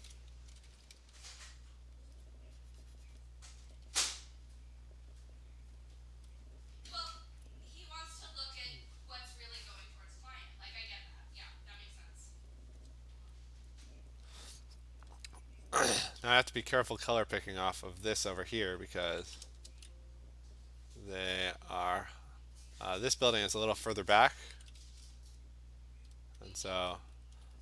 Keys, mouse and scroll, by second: 0.5 ], 0.7 ], 0.8 ], 1.0 ], 2.1 alt+click, 2.2 alt+click, 3.2 click, 3.7 alt+click, 3.8 [, 4.1 [, 5.7 click, 6.3 click, 7.1 alt+click, 7.4-12.4 alt+click, 8.8 click, 9.2 click, 9.4 click, 9.8 click, 10.0 click, 10.4 click, 10.8 click, 11.8 click, 12.5 click, 13.4-13.9 alt+click, 13.7 click, 15.0 click, 15.2 click, 15.7 click, 16.0 ], 16.2 ], 16.4 ], 16.6 ], 16.9 click, 17.1 click, 18.9 [, 19.2 [, 19.4 [, 19.7 [, 21.4 click, 21.8 click, 22.2 click, 22.5 click, 23.0 click, 23.8 click, 24.6 ], 24.8 ], 25.0 ], 25.4 click, 26.5-27.6 alt+click, 27.2 click.